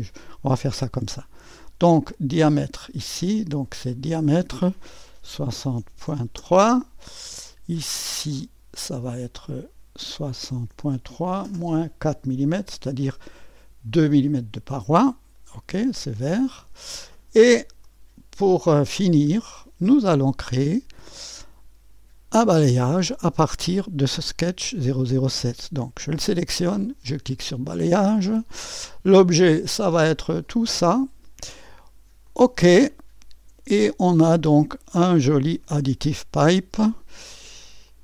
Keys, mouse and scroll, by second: 0.4 right click, 1.4 click, 3.3-5.2 drag, 5.0-7.4 typing, 8.4 click, 9.5 click, 10.2-12.5 typing, 14.3-20.1 drag, 14.3 typing, 24.3 click, 27.4 click, 29.2 click, 30.4 click, 32.2 click, 34.4 click, 35.5 ctrl+d, 36.5 click, 37.9 click.